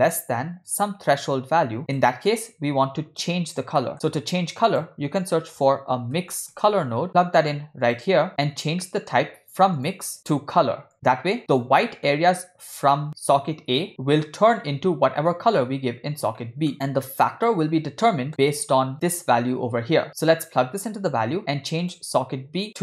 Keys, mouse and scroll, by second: 0.7-1.8 drag, 2.3-3.2 drag, 3.8 middle click, 4.2 shift+a, 8.8-9.1 middle drag, 9.2-9.5 scroll up 2, 9.7-10.9 drag, 10.9-11.3 middle drag, 11.4 click, 11.8 middle click, 13.9 middle click, 16.4 middle click, 17.0 middle click, 17.2-18.0 scroll up 2, 18.1 middle click, 19.0-21.1 drag, 21.8 click.